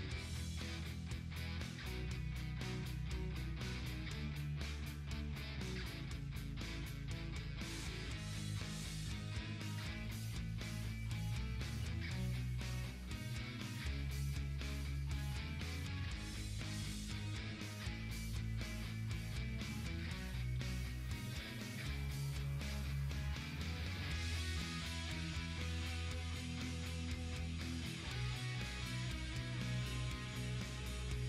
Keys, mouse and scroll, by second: 0.0-1.9 typing, 1.0 scroll down 1, 2.8-3.5 ctrl+scroll up 1, 4.1 scroll down 1, 4.4-5.1 ctrl+scroll up 2, 5.1-9.0 drag, 12.5 scroll down 1, 13.1 ctrl+Num_Lock, 13.1-13.6 scroll down 2, 15.3-17.7 drag.